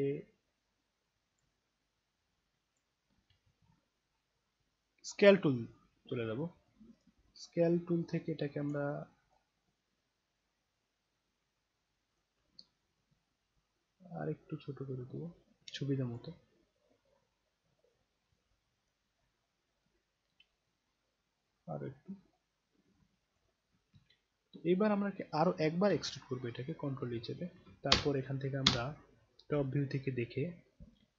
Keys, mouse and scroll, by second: 0.6-1.4 drag, 1.9-2.7 drag, 3.3 ctrl+z, 5.2 click, 7.9 alt+click, 8.7-9.3 alt+right drag, 9.6-10.4 alt+middle drag, 10.6-12.1 alt+right drag, 12.9-16.1 drag, 17.0-17.7 scroll down 3, 18.3 alt+click, 19.1-19.8 alt+right drag, 21.1 click, 27.1 ctrl+e, 27.9 space, 28.6 space, 29.3 scroll down 2, 29.7 scroll up 2.